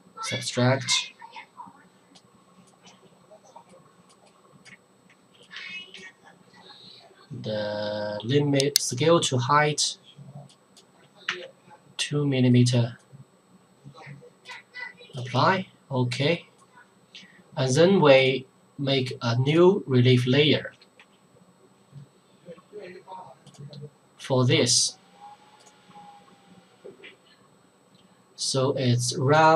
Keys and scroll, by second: 4.7 Caps_Lock, 5.3 shift+Caps_Lock, 20.7 Return.